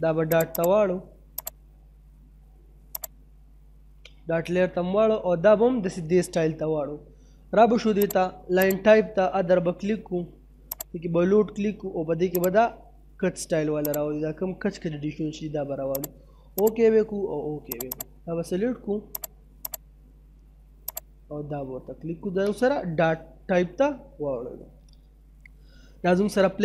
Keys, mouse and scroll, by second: 4.1 middle click, 4.6 scroll down 1, 4.8 middle click, 5.6 middle click, 8.0 click, 21.7-22.3 scroll up 1, 22.3 scroll down 1, 22.7 middle click, 23.1 scroll down 1, 23.4 middle click.